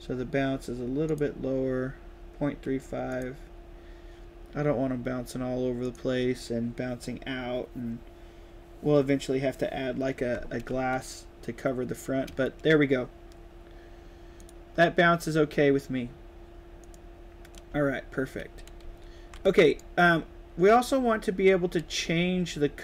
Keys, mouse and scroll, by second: 1.0 click, 3.0 click, 5.7 click, 14.3 click, 16.7 click, 17.4-19.7 right drag, 17.6 s, 18.7 w, 19.4 s, 21.6 right click, 21.6 a, 22.0 right click, 22.2 right click, 22.6 right click.